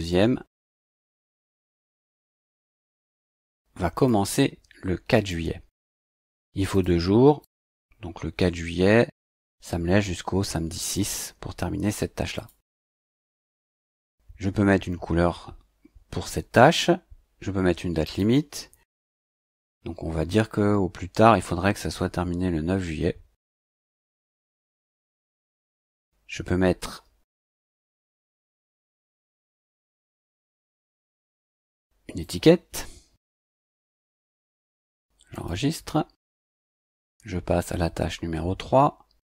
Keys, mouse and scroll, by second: 2.3 click, 3.0 click, 3.9 click, 5.1 click, 6.7 click, 7.4 click, 10.8 click, 12.3 click, 18.0 click, 24.2 click, 25.8 click, 28.2-31.3 typing, 32.2 click, 35.3 click, 36.6 click.